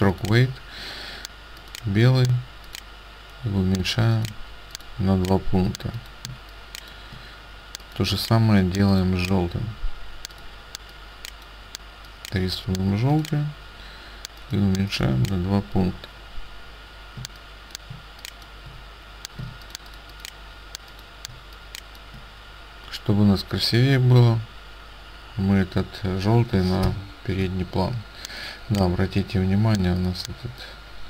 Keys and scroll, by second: 6.4 space, 17.3 space, 19.5 ctrl+space.